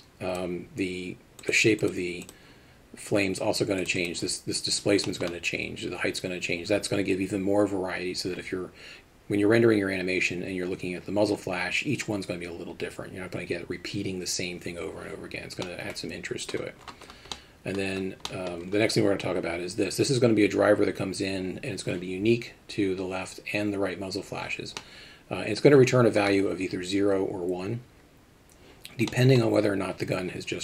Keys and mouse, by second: 1.8 click, 4.0 click, 5.2 middle drag, 15.7 middle click, 17.4 middle click, 18.3 middle click, 25.0-26.3 middle drag, 29.1 middle click.